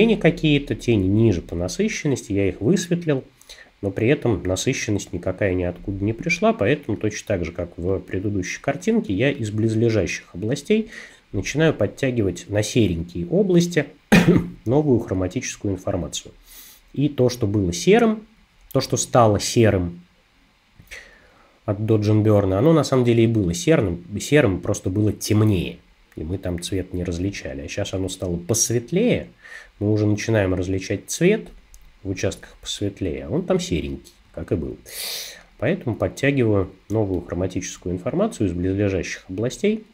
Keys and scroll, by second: 32.3 space, 36.9 space.